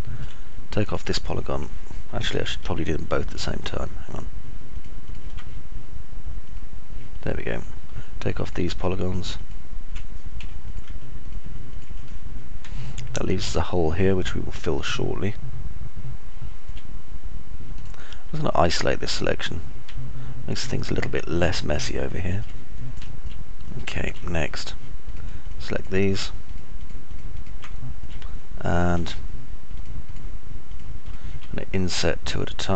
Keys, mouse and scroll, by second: 1.4 right click, 2.9 ctrl+z, 5.6 ctrl+right click, 9.9 ctrl+right click, 13.3-17.3 alt+drag, 13.3-17.3 alt+middle drag, 13.3-17.3 alt+right drag, 20.6-22.9 alt+drag, 20.6-22.9 alt+middle drag, 20.6-22.9 alt+right drag, 23.4 alt+click, 23.4 alt+middle click, 23.4 alt+right click, 24.3 click, 24.3 middle click, 24.3 right click, 24.3 scroll up 1, 25.9 ctrl+right click, 26.6 ctrl+right click, 26.9 ctrl+right click, 28.4 alt+click, 28.4 alt+middle click, 28.4 alt+right click, 30.6 ctrl+right click, 31.6 ctrl+right click.